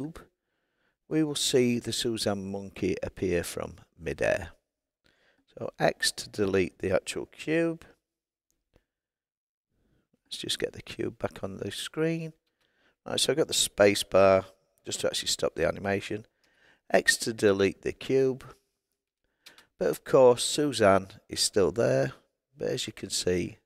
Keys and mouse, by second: 12.4 space, 16.4 x, 19.4 space.